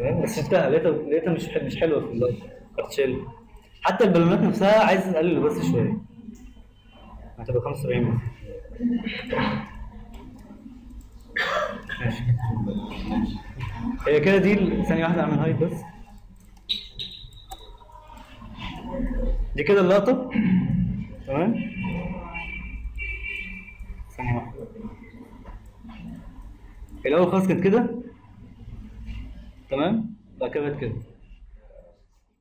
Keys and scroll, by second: 15.3 ctrl+h.